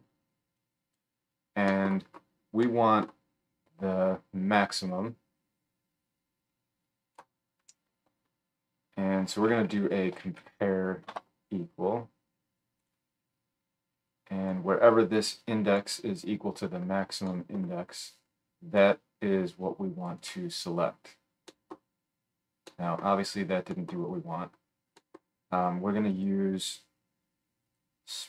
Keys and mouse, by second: 0.5-12.8 middle drag, 12.8-14.5 drag, 14.5-23.3 middle drag.